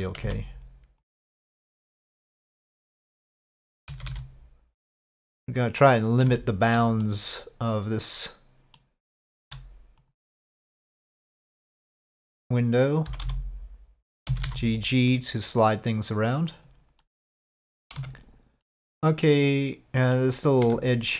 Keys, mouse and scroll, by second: 0.2 c, 3.9 g, 6.4 shift+middle click, 7.0-8.8 middle drag, 9.2 shift+middle click, 10.0 click, 10.8 shift+click, 13.1 j, 13.2 j, 14.3 g, 17.1 middle click, 17.5 g, 18.0 Tab, 18.6-20.1 middle drag, 20.6 Tab.